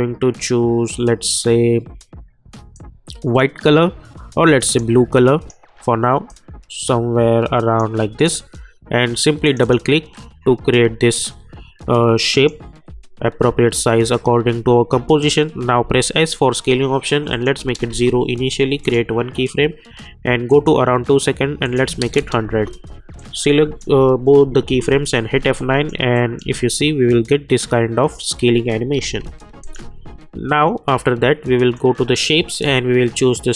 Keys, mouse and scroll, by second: 2.7-8.2 drag, 12.3 click, 15.8 s, 17.3 click, 17.8 Return, 18.8 click, 22.4 Return, 23.1-24.7 drag, 24.7 F9, 25.5 click, 26.4 space, 29.1 k, 29.6-33.5 drag.